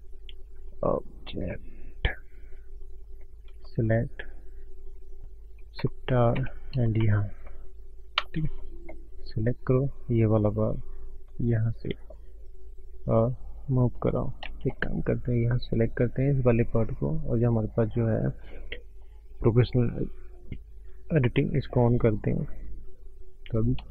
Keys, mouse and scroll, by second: 0.2 click, 1.3 click, 2.9 click, 3.1 click.